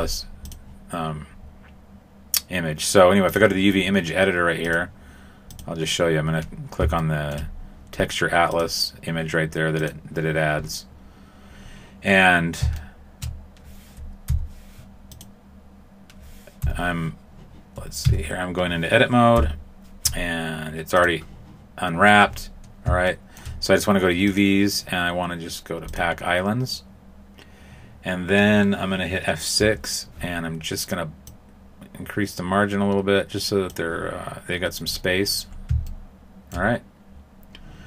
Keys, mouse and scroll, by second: 0.4 click, 4.6 click, 6.2-7.0 scroll down 5, 7.0 shift+middle click, 8.5 click, 12.7 shift+middle click, 14.2 u, 16.6 u, 18.0 Tab, 19.3 u, 23.0 shift+middle click, 24.2 click, 26.2 click, 29.5 F6, 34.6-35.2 scroll up 7, 35.2-35.8 scroll down 5, 35.8 shift+middle click.